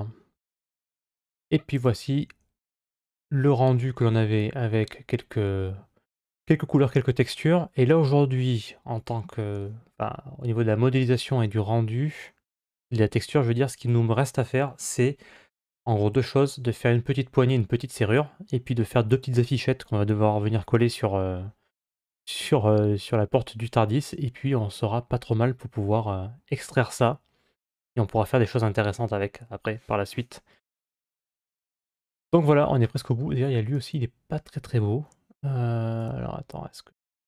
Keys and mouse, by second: 3.8-9.2 middle drag, 9.8-10.7 middle drag, 22.3-28.4 middle drag, 31.0-32.7 middle drag, 35.8 click.